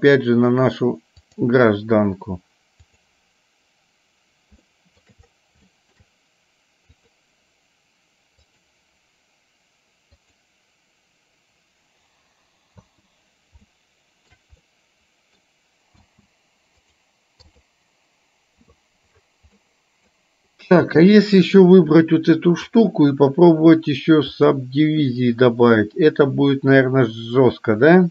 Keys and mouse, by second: 3.0 click, 4.7 shift+middle click, 5.9 shift+middle click, 7.1 click, 10.2 click, 12.9 space, 13.9 shift+middle click, 14.7-15.7 middle drag, 16.1 space, 17.0 right click, 19.6 middle click, 20.9 click, 22.9-28.1 drag.